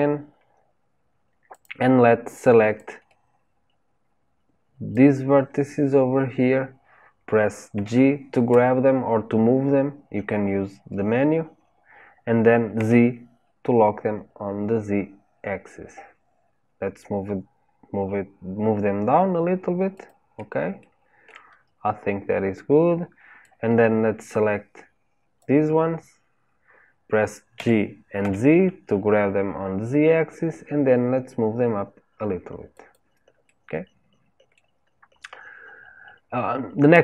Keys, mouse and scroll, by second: 1.5 click, 2.7 click, 7.7 g, 20.7 shift+middle click, 21.5-23.3 scroll up 2, 23.3 click, 27.5 g, 33.4-34.9 middle drag, 34.9-35.6 scroll down 1, 35.6-37.0 scroll down 1.